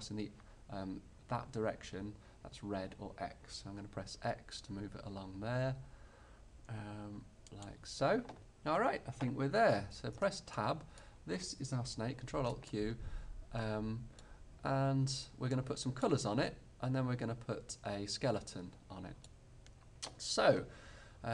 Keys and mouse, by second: 7.8-9.6 drag, 9.6-10.6 middle drag, 10.2 Tab, 12.3 ctrl+alt+q, 16.6-18.1 middle drag, 19.6-21.3 middle drag.